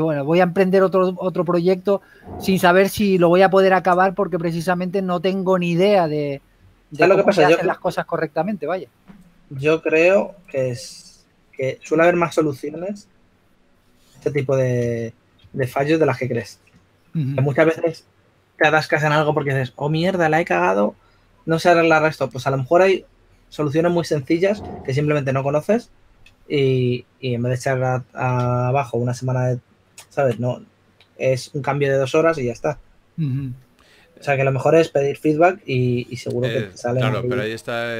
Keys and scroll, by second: 0.8 s, 4.3 s, 5.9-7.8 typing, 8.9 typing, 12.7-14.2 typing, 15.4 shift+f, 28.8 w, 30.4 super+d, 33.9 w, 36.2-37.7 typing.